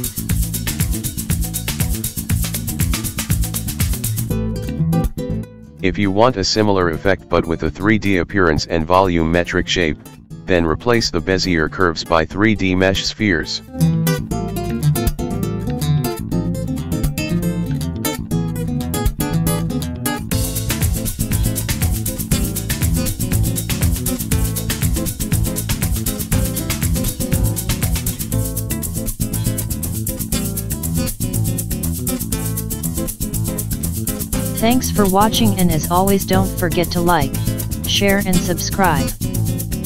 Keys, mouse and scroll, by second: 0.5 Tab, 1.1 a, 2.2 e, 6.8 Tab, 7.1 middle click, 8.0 middle click, 9.3 r, 10.5 click, 11.1 click, 12.8 click, 14.0 click, 15.5 middle click, 16.4 g, 17.7 middle click, 18.4 click, 19.1 shift+click, 19.7 g, 21.6 click, 22.2 g, 23.8 middle click, 25.2 space, 25.8 click, 29.0 space, 29.8 click, 30.1 click, 30.9 shift+click, 31.5 s, 32.6 click, 33.1 click, 33.8 space, 34.8 middle click, 38.2 scroll down 3.